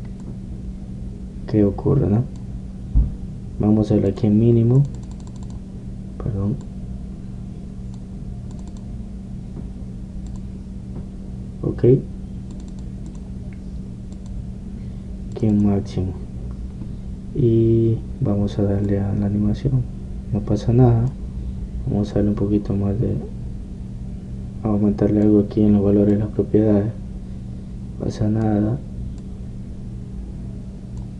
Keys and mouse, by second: 3.1-5.3 middle drag, 5.3-25.1 drag, 25.1 middle click, 27.3-29.5 drag, 30.3-31.1 drag.